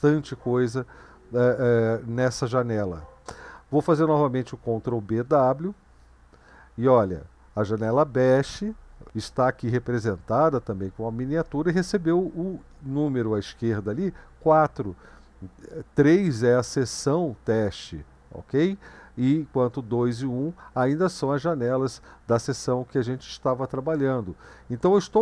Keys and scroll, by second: 4.7 ctrl+b, 5.6 w, 15.1 Up, 19.0 Up, 19.9 Up, 24.9 Down, 25.0 Down.